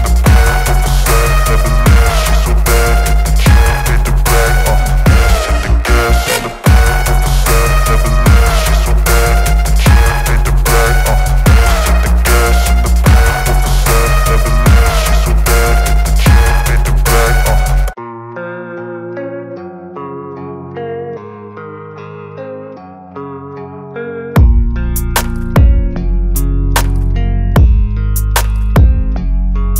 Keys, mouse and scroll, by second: 2.8-4.6 alt+drag, 14.1 ctrl+t, 16.5-18.6 drag, 29.1 shift+click.